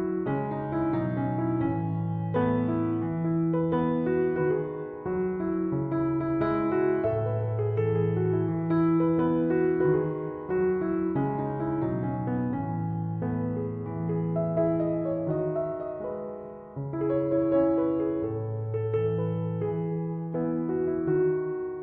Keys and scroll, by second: 4.1 0, 4.4 Tab, 4.9 0, 5.4 Tab.